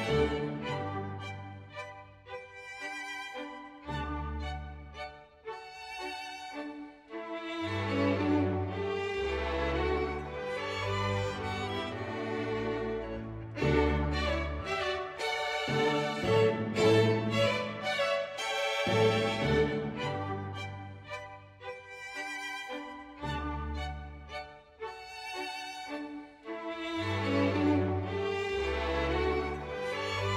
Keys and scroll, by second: 1.3 Page_Down, 3.2 ctrl+z, 4.1 ctrl+z, 4.7 ctrl+z, 5.1 Page_Down, 5.3 Page_Up, 6.0 Page_Down, 7.0 ctrl+z, 7.3 Page_Up, 7.6 Page_Down, 10.7 ctrl+z, 10.9 ctrl+z, 13.3 ctrl+s, 14.4 Page_Down, 15.4 Page_Up, 15.5 Page_Down, 18.7 Page_Down, 20.4 Page_Down, 20.5 Page_Up, 20.6 Page_Down, 21.0 Page_Up, 21.1 Page_Down, 22.1 Page_Down, 22.7 Page_Up, 23.6 Page_Up, 23.6 Page_Down, 23.8 Page_Up, 24.5 Page_Down, 25.5 Page_Down, 26.5 Page_Up, 26.5 Page_Down, 27.1 ctrl+z, 27.4 Page_Down, 27.8 Page_Up, 27.8 Page_Down, 28.1 Page_Down, 28.5 Page_Down, 28.8 Page_Down, 29.0 Page_Down, 29.2 Page_Down, 29.3 Page_Down, 29.6 Page_Down, 29.9 space, 30.1 Page_Down, 30.3 Page_Down.